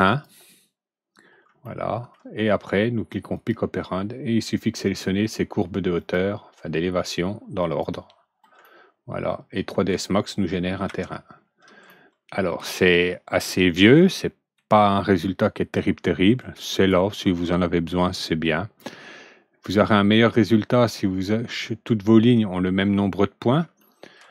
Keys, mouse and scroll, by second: 0.0 click, 1.6 alt+middle click, 3.2 click, 4.8 click, 5.9 click, 7.5 click, 8.5-9.8 alt+middle drag, 10.8 F3, 11.8-14.5 alt+middle drag, 16.3-16.8 drag, 18.4 click, 23.8 alt+middle click.